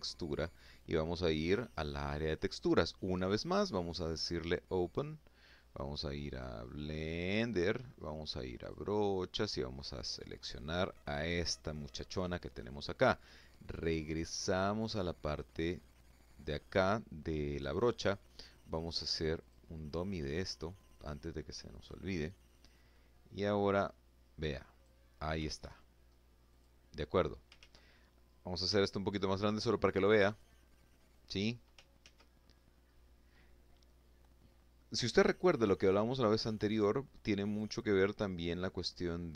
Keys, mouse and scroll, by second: 2.9 click, 4.8 click, 5.5 click, 7.1 click, 7.9 click, 9.8 click, 12.8 click, 13.3 click, 17.9 click, 21.2-21.6 scroll up 2, 21.6-21.9 scroll down 2, 22.3-22.6 scroll up 2, 22.9 click, 24.0 ctrl+z, 24.5-24.9 ctrl+scroll up 3, 25.0 click, 26.1 ctrl+z, 27.1 f, 27.9 click, 28.8 click, 30.5 ctrl+z, 33.9-35.7 scroll down 2, 35.9 click, 36.8-37.9 scroll down 2, 37.9 click, 38.8 click.